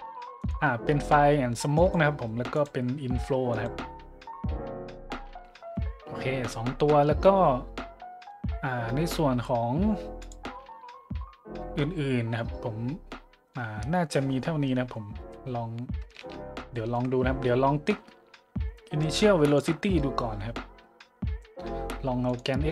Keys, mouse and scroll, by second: 0.4 click, 1.7 click, 2.5 click, 3.5 click, 10.2-10.5 drag, 15.3 middle click, 15.7 middle click, 16.7-17.0 shift+middle drag, 17.1 middle drag, 19.4 click, 20.0 middle click, 22.3 click.